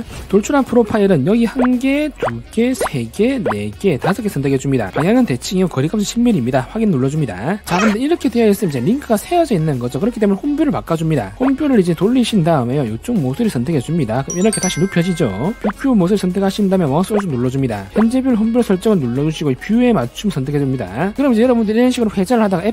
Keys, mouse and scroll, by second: 1.9 click, 2.5 click, 3.0 click, 3.8 click, 4.4 click, 6.2 click, 8.5 click, 9.2 middle click, 12.0 click, 12.7 click, 13.9 click, 14.7 click, 15.2 scroll up 2, 17.7 right click, 21.1 click, 22.2 shift+middle click.